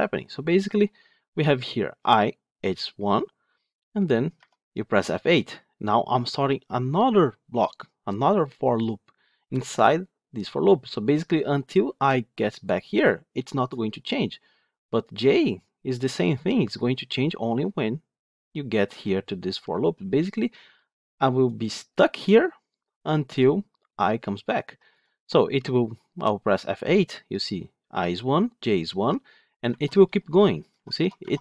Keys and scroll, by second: 2.8 F8, 25.4 F8.